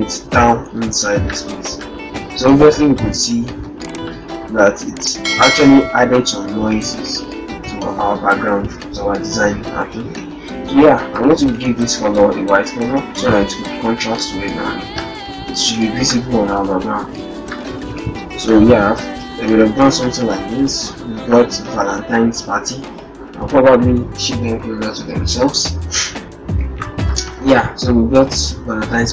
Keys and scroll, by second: 0.3 ctrl+a, 6.8 ctrl+-, 7.0 ctrl+0, 11.5 ctrl+a, 13.2 ctrl+Return, 15.7 ctrl+a, 17.9 ctrl+Return, 19.7 ctrl+-, 20.5 0, 21.1 -.